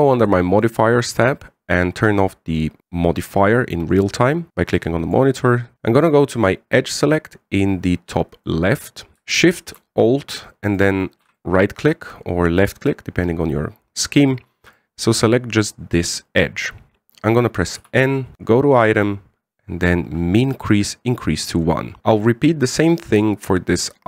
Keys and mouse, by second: 1.3 click, 9.1 click, 9.4 right click, 11.4 alt+shift+right click, 11.6 alt+shift+right click, 12.1-15.5 middle drag, 18.3 n, 19.2 click, 20.3-22.0 drag, 22.6 middle click, 23.6 right click.